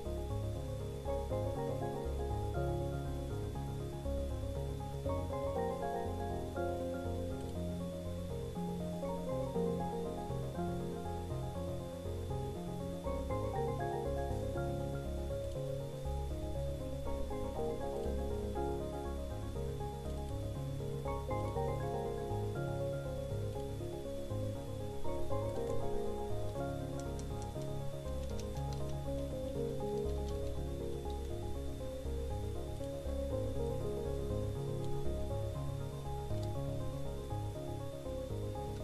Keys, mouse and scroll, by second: 10.8 click, 19.1 click, 21.6 click, 23.8 click, 25.6 click, 27.8 click, 30.0 click, 30.7 Return, 31.4-35.1 typing, 36.4 click, 37.2-38.7 drag.